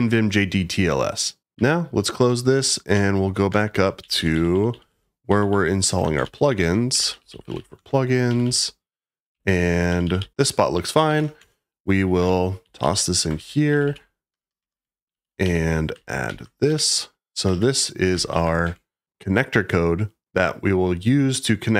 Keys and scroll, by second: 1.5 q, 2.5 j, 2.9 k, 4.0-11.0 typing, 11.3 Return, 12.6-18.3 typing, 16.6 Escape, 18.6 Escape.